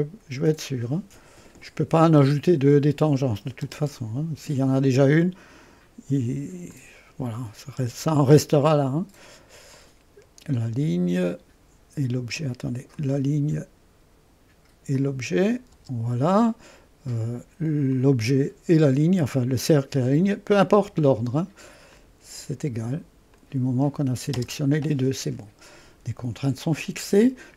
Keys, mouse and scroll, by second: 1.6 click, 2.5 click, 3.7 Return, 5.2-7.8 drag, 7.8 Return, 9.7 click, 11.2 click, 12.9 click, 15.0 click, 15.8 Return, 17.9 click, 19.7 click, 20.8 Return, 21.9-24.4 drag, 24.4 Return.